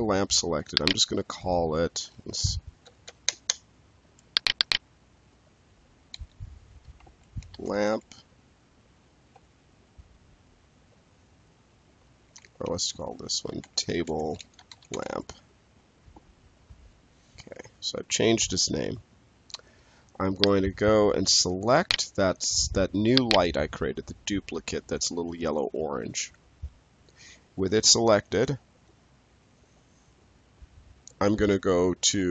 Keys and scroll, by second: 2.5 Up, 6.0 ctrl+a, 7.3 shift+l, 7.6 a, 9.2 p, 12.5-15.3 typing, 16.6 Return.